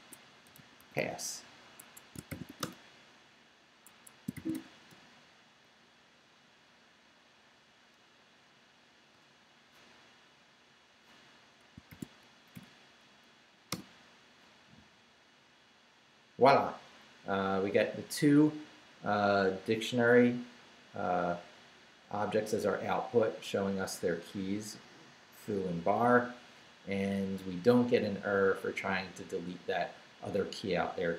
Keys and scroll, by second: 0.0-3.0 typing, 1.8 Escape, 3.9 Escape, 4.1-5.0 typing, 5.6 Up, 9.1 Return, 11.9 shift+;, 12.3 shift+Up, 13.7 Return.